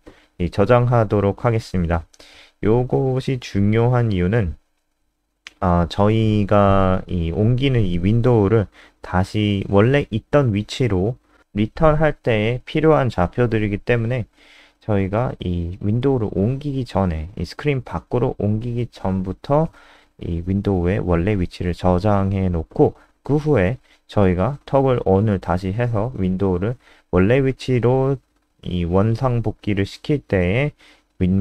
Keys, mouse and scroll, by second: 0.0-0.4 typing, 0.6 ctrl+s, 1.1-2.1 scroll up 1, 2.5 click, 6.0 F3, 10.7 click, 17.5 ctrl+w, 18.1 click, 19.0-19.6 scroll down 2, 19.6 click, 22.5 shift+Home, 24.7-30.4 typing.